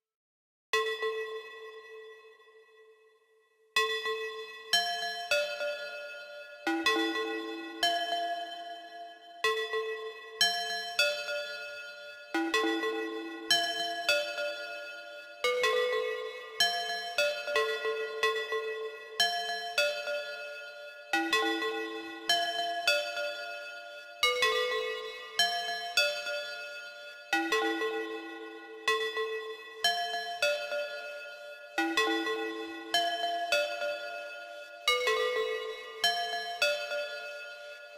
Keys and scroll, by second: 33.4 ctrl+c, 33.8 ctrl+b.